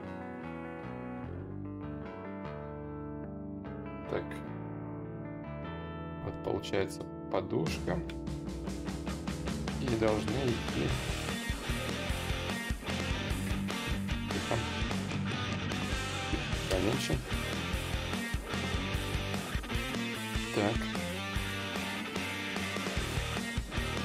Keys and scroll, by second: 0.2 ctrl+z, 13.3 ctrl+z, 14.5 space, 19.2 ctrl+z, 19.2 y.